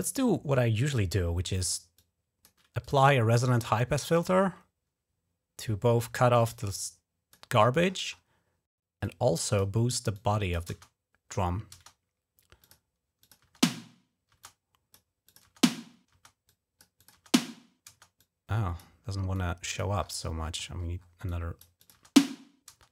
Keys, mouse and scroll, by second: 1.8 click, 2.6 click, 2.8 click, 3.9 click, 6.3 click, 8.8 click, 9.9 click, 10.5 space, 11.5 space, 12.4 click, 13.0 click, 13.2-14.1 typing, 14.2 click, 15.1 click, 15.3-15.7 typing, 16.3 click, 16.8 click, 18.0 click, 19.2 click, 20.2-20.9 scroll down 5, 21.1 click, 21.6 click.